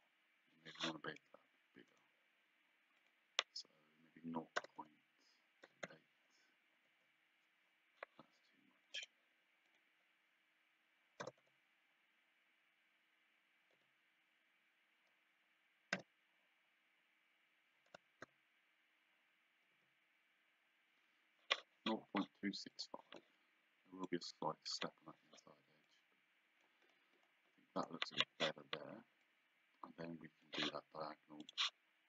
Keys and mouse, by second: 2.0 right click, 4.6 KP_0, 4.8 KP_Decimal, 6.9 KP_Enter, 9.1 right click, 9.7 click, 11.3 KP_0, 13.8 KP_2, 16.0 KP_7, 18.0 BackSpace, 18.3 KP_6, 19.8 KP_5, 22.8 click, 24.1 click, 25.9 click, 29.3 click, 31.5 click.